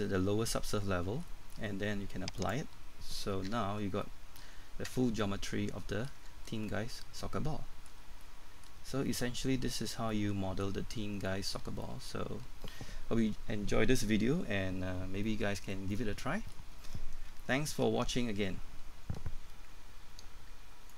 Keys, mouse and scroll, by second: 0.8-1.3 scroll up 1, 1.3 middle click, 2.4 click, 3.5 Tab, 3.8 scroll down 1, 4.0 middle click, 4.5 Tab, 5.2 middle click, 6.2 Tab, 6.5 middle click, 8.0 scroll down 1, 8.2 middle click, 8.8 scroll up 1, 9.1 middle click, 20.9 click.